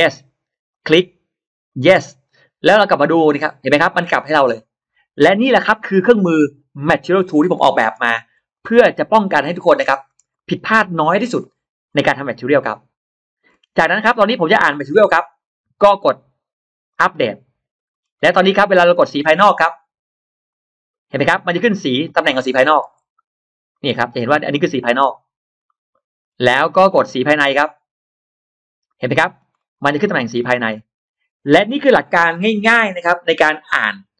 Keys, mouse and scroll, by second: 0.6 click, 1.5 click, 3.1 click, 3.7 scroll up 1, 3.9 middle click, 7.6 middle click, 8.4-9.4 drag, 9.6 scroll down 1, 9.9 space, 10.2 scroll up 1, 10.2 middle click, 11.2 click, 11.7 scroll up 1, 12.1-13.2 middle drag, 14.1 click, 15.1 click, 16.7 click, 17.8 scroll down 1, 18.1 middle click, 18.6 space, 18.7 middle click, 18.7 scroll up 1, 18.9 scroll down 1, 18.9 space, 19.1 scroll up 1, 20.3 click, 21.0 middle click, 22.1 middle click, 23.6 click, 24.1 middle click, 25.5 middle click, 28.0 click, 28.7 middle click, 29.1-29.4 scroll down 2, 29.6-30.9 scroll up 4, 30.1-30.5 middle drag.